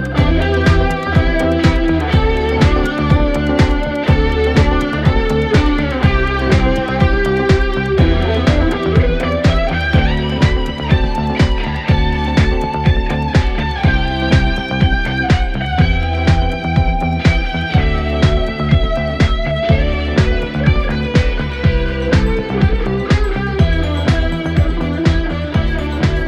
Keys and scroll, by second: 3.2 ctrl+d, 3.4 Escape, 6.8 4, 10.2 2, 17.7 Escape.